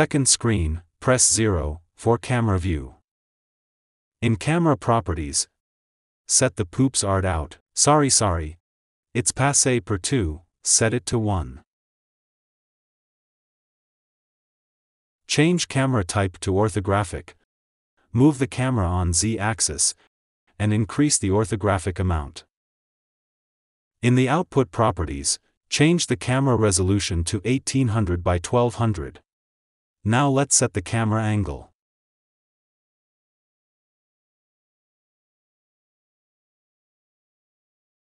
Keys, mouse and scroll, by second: 1.1 click, 1.7 KP_0, 11.0-13.6 drag, 13.6 KP_3, 13.6 g, 17.3-19.3 drag, 19.3 g, 22.6-27.2 drag, 27.2 KP_0, 31.2 click, 32.3 r, 34.7 click, 34.8 g.